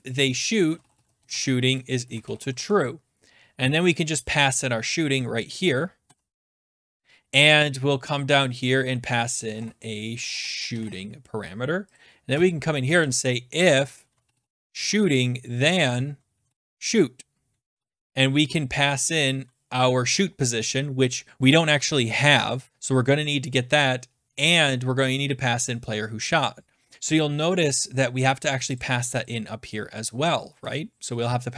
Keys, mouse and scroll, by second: 0.0-3.1 typing, 4.3 click, 5.4 Left, 5.8-7.2 typing, 7.6 scroll, 8.6 middle click, 8.6 click, 9.2-11.3 typing, 11.3-11.8 scroll, 11.9 click, 12.3 Return, 12.7-18.3 typing, 13.7 Return, 28.8 click, 29.2 click, 30.2-31.5 typing.